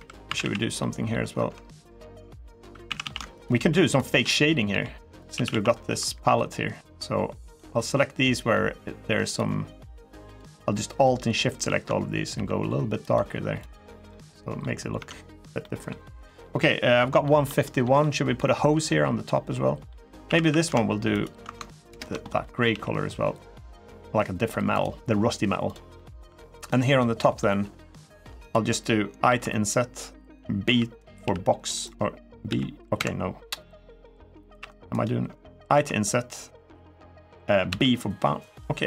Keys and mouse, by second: 0.0 a, 0.2 a, 0.5 middle click, 2.4 3, 2.6 a, 2.8 a, 3.2 alt+shift+click, 4.5 g, 4.9 click, 5.1 a, 5.3 a, 9.1 alt+shift+click, 10.1 alt+shift+click, 12.1 g, 12.8 click, 13.4 click, 13.7 Tab, 13.8 middle click, 14.7 Tab, 15.4 middle click, 16.0 middle click, 17.0 middle click, 17.4 shift+middle click, 17.8 middle click, 18.6 middle click, 19.3 middle click, 20.0 a, 20.2 a, 20.9 alt+shift+click, 21.7 ctrl+KP_Add, 22.5 g, 24.5 click, 25.7 middle click, 26.0 3, 26.4 click, 26.7 middle click, 29.0 i, 30.5 n, 30.5 b, 31.0 b, 31.6 click, 32.2 b, 34.3 g, 34.7 right click, 35.5 i, 37.4 b, 38.2 right click, 38.6 middle click.